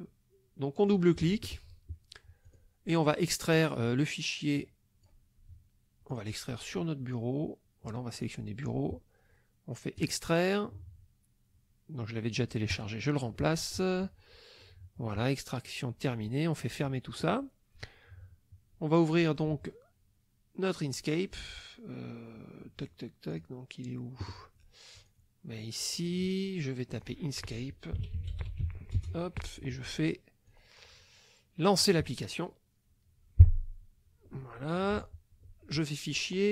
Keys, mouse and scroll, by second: 0.8 click, 2.4 click, 4.6 click, 6.1 click, 8.1 click, 10.0 click, 12.7 click, 16.6 click, 20.9 click, 23.3 click, 25.0 click, 26.9 click, 27.7-29.1 typing, 30.5 click, 31.8 click, 35.8 click.